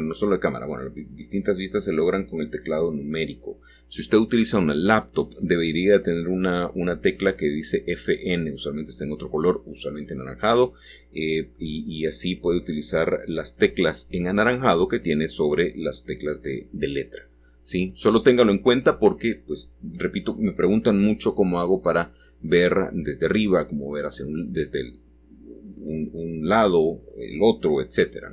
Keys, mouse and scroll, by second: 1.1 7, 2.7-5.2 shift+middle drag, 5.7 g, 12.4 click, 13.2-14.6 shift+middle drag, 14.6 scroll down 1, 14.9 middle click, 15.4-17.2 middle drag, 19.2 l, 23.4 g.